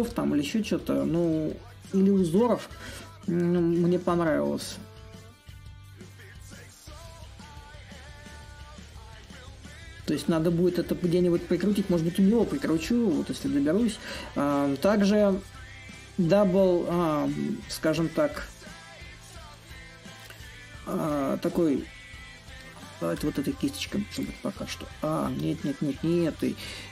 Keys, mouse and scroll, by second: 0.0 click, 0.6-3.2 drag, 3.9-8.9 drag, 16.9-22.0 drag, 22.8-25.1 drag, 25.1 ctrl+z.